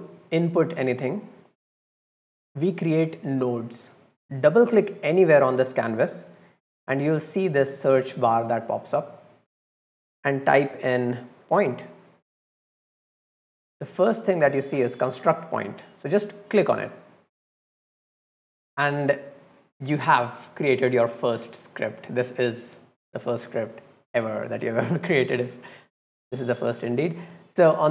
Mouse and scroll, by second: 5.8 click, 16.4 click, 23.7 middle click, 23.7-24.9 scroll down 8, 24.2 middle click, 24.5 middle click, 24.7 middle click, 25.2-26.3 drag, 26.6 middle click, 27.0 middle click, 27.3-27.9 drag.